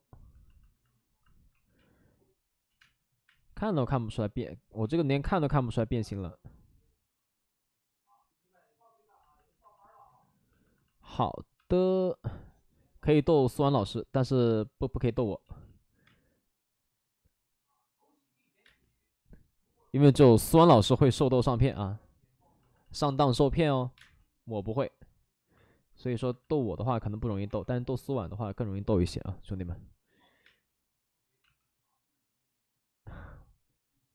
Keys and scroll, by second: 0.0 ctrl+z, 1.5 5, 1.7 space, 2.2 space, 2.3 space, 11.6 space, 13.4 ctrl+z, 13.6 ctrl+z, 13.7 ctrl+z, 15.1 space, 15.4 ctrl+z, 16.0 space, 18.6 space, 20.0 space, 20.4 ctrl+z, 20.8 space, 23.9 space, 23.9 1, 26.7 space, 27.4 1, 28.8-29.6 typing, 31.4 ctrl+z.